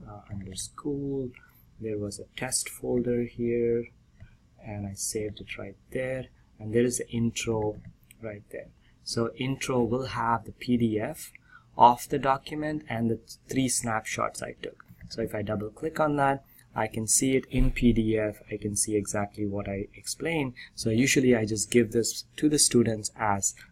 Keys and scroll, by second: 17.3 ctrl+p, 18.5 Right, 18.9 ctrl+n, 19.8 ctrl+p.